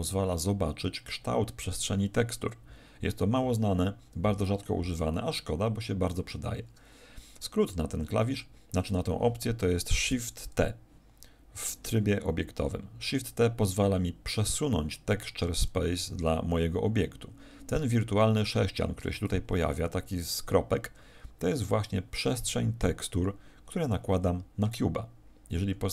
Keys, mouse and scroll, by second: 3.0 middle click, 5.0 middle click, 12.9 shift+t, 19.5 shift+t.